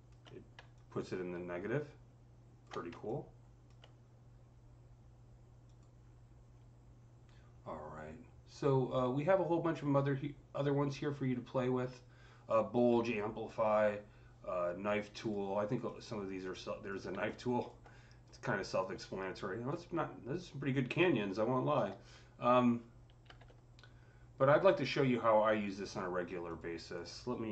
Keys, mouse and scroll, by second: 15.0 ctrl+click, 15.0 typing, 15.7-26.3 drag, 23.1 typing, 23.1 ctrl+z.